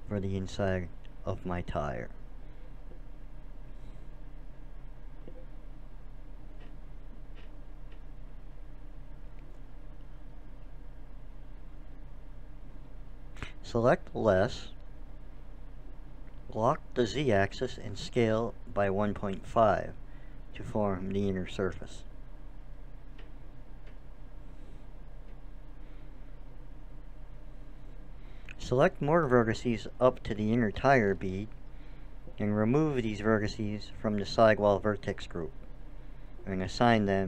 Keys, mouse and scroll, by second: 2.6-4.9 drag, 6.0-7.4 drag, 12.4 ctrl+KP_Subtract, 15.7-17.9 middle drag, 15.8 s, 23.2-25.1 middle drag, 31.4-34.9 drag.